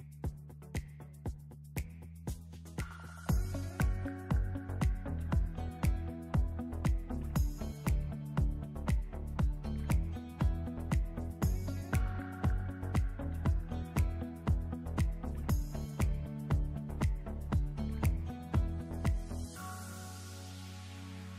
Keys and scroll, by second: 9.1 space.